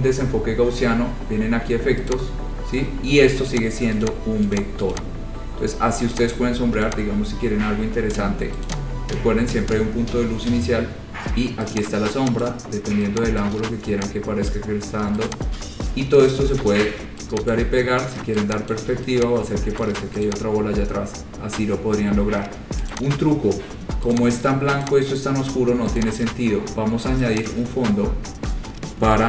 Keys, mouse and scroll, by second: 2.3 click, 3.7 click, 4.3 click, 4.7 click, 5.1 click, 6.3 click, 7.1 click, 7.3-8.7 scroll, 8.9 click, 11.9 click, 12.7 click, 13.6 click, 14.7 click, 15.5 shift+click, 15.7 shift+click, 16.8 ctrl+c, 17.0 ctrl+v, 17.7 click, 18.9 shift+click, 20.1 click, 20.5 click, 20.6 shift+click, 20.7-21.6 scroll, 22.1-23.1 scroll, 23.1 click, 23.4-23.7 scroll, 24.3 click, 25.1 click, 26.2 click, 26.5 scroll, 28.7 click.